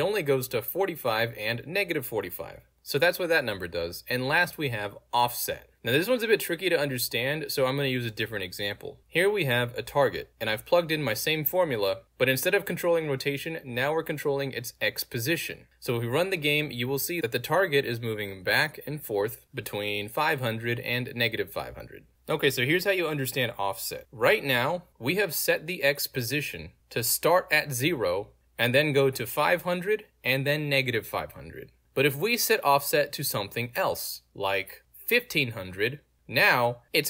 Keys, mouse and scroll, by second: 4.1 click, 4.7 click, 7.5 alt+click, 7.9 alt+right click, 8.9 click, 9.9 click, 11.2 click, 12.3 click, 13.3 click, 16.3 click, 17.2 click, 19.3 w, 24.1 alt+click, 26.9 alt+click, 32.4-33.7 typing, 34.8 click, 35.3 click, 35.8 alt+middle click, 36.0-37.0 drag.